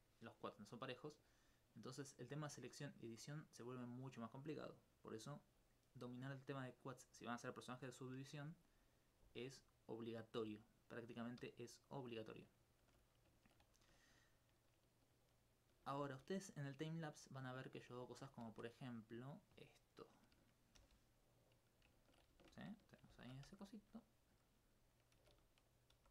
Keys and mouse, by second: 5.9-7.1 middle drag, 10.6 alt+click, 19.1 click, 19.9 right click, 20.8 shift+d, 21.6 click, 22.5 shift+Tab, 24.0 click, 24.3 s, 25.0 click, 25.7 click, 26.0 g.